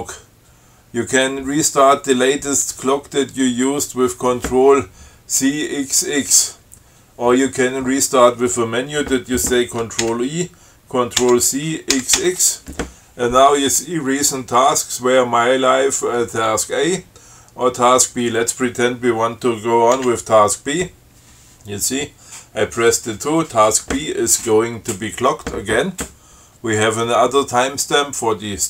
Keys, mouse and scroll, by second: 10.3 ctrl+u, 11.5 ctrl+c, 12.2 ctrl+x, 20.2 2.